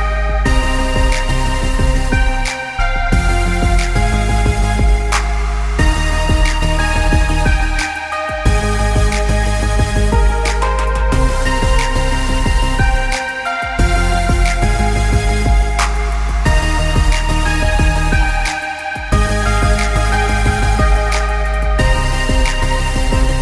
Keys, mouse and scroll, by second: 0.4 click, 2.8 click, 4.0 click, 9.5 click, 9.9 click, 12.7 click, 13.8 click, 15.5 click, 18.8 click, 21.9 click.